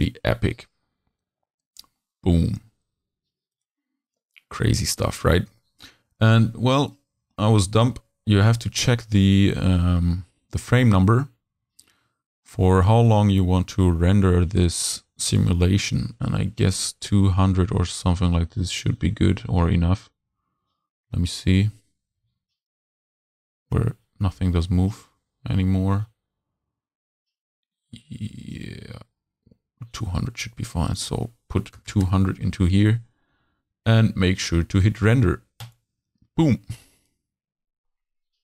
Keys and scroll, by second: 31.8 2, 31.9 0.